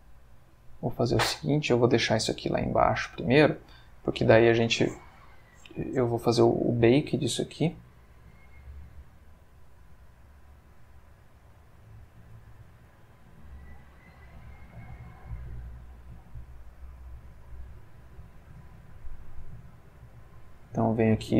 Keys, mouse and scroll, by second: 1.8 Escape, 2.2 click, 4.2 click, 8.7 click, 12.4 click, 12.9 click, 13.7 middle click, 15.1 middle click, 16.1-18.6 middle drag, 19.4 click, 20.6-21.3 middle drag.